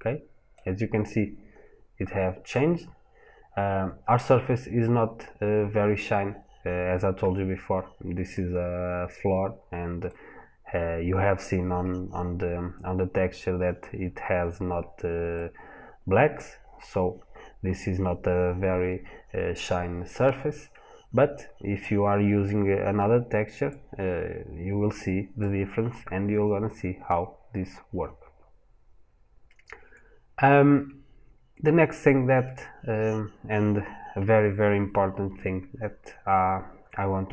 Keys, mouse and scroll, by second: 0.6 scroll up 1, 1.4 scroll down 1, 2.3 middle click, 4.3 scroll up 1, 5.9 scroll down 1, 8.1 middle click, 15.2 middle click, 21.6 click.